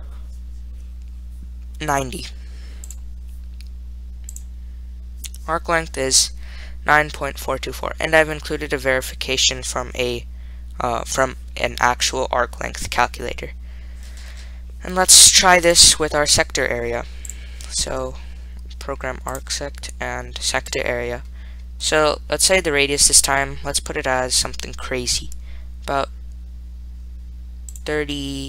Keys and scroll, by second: 2.2 9, 3.1 0, 4.6 Return, 17.6 2, 19.6 Return, 21.0 2, 22.2-23.0 typing, 27.8-28.4 typing.